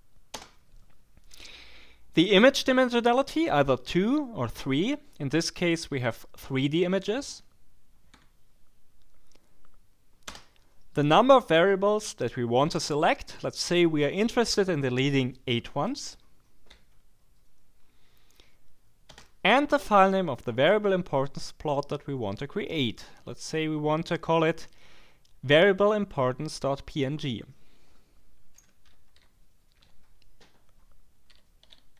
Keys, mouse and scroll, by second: 0.3 space, 8.1 3, 10.2 space, 16.7 8, 19.1 space, 28.3-31.9 typing, 30.4 Tab.